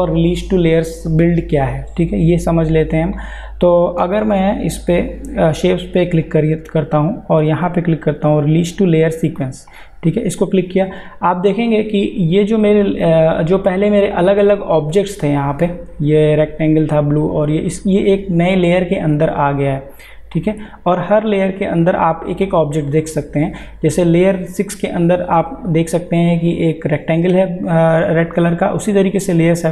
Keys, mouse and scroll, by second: 4.5 click, 9.7 click, 19.3 click.